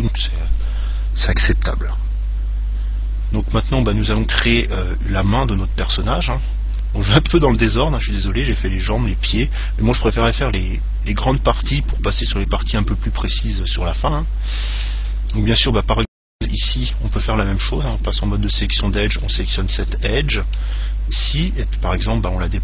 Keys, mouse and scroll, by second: 4.1-6.4 middle drag, 8.1-10.5 middle drag, 10.3-12.0 scroll up 1, 12.0-12.6 scroll up 1, 12.6 middle click, 13.2-14.1 scroll up 1, 14.1-17.5 middle drag, 17.1 ctrl+Tab, 18.8 right click, 20.3-22.1 middle drag, 22.1-22.6 scroll down 1.